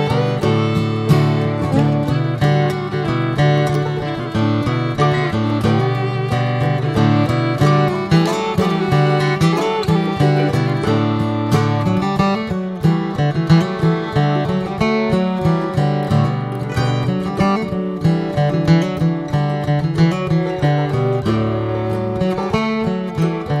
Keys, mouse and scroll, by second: 1.1 Tab, 1.3 drag, 1.6 scroll down 1, 1.8 drag, 2.2 click, 2.8 right click, 2.9 click, 3.1 scroll down 3, 3.4-3.7 middle drag, 3.7 alt+z, 3.9 click, 4.2 scroll down 2, 4.4-4.9 middle drag, 4.9 scroll up 4, 5.3 Tab, 5.6 alt+middle click, 5.9 alt+middle click, 6.1-6.6 alt+scroll up 2, 6.3 alt+z, 7.1 middle click, 7.3 scroll up 1, 7.8 alt+middle click, 8.1 alt+middle click, 8.4 alt+z, 8.6 middle click, 8.9 scroll up 2, 9.9 middle click, 10.4 alt+z, 10.7 shift+middle click, 11.2 click, 12.0 click, 13.2 Tab, 13.5-14.0 scroll down 10, 14.8 drag, 15.0 scroll down 3, 15.3-15.7 middle drag, 15.7 click, 15.9 alt+z, 16.1 drag, 16.4 scroll up 2, 16.9 click, 17.5 shift+click, 18.5 shift+click, 19.3 ctrl+j, 19.9 ctrl+a, 20.3 click, 20.6 scroll down 1, 20.9-23.6 middle drag.